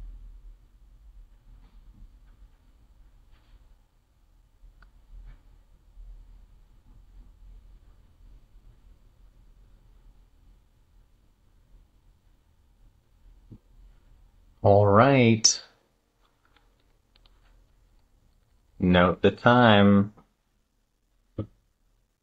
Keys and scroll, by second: 18.1 BackSpace.